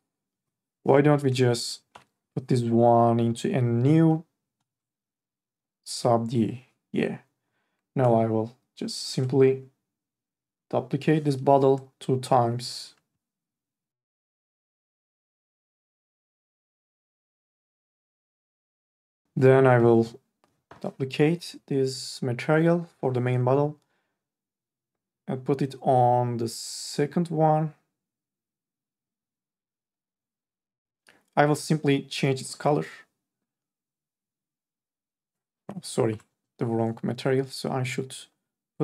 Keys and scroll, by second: 1.9 Delete, 14.8 ctrl+z, 36.3 ctrl+z.